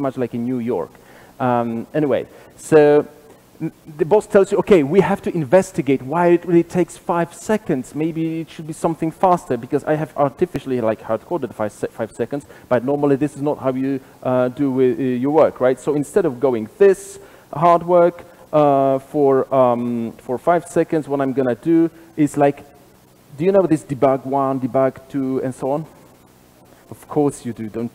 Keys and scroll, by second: 11.4 super+b, 19.0 super+/.